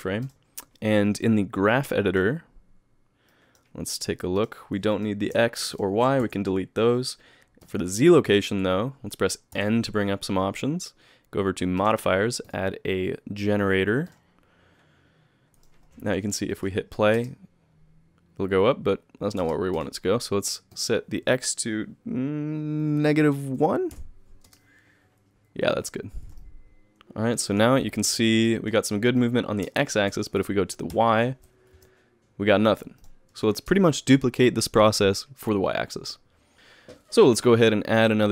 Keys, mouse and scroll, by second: 1.9 click, 3.3 click, 4.4 click, 4.9 click, 5.7 shift+click, 6.2 x, 7.6 click, 16.2 click, 16.5 click, 17.1 space, 19.5 space, 19.7 click, 20.7 click, 24.4 space, 25.9-26.4 scroll down 1, 26.4 middle click, 26.4-26.8 scroll down 3, 28.0 KP_3, 28.3 KP_Add, 28.5 KP_Add, 28.7 KP_1, 29.0 KP_Add, 29.2 KP_Add, 30.9 KP_1, 31.7 KP_3, 33.0 click, 33.7 space, 36.5 click, 37.9 click.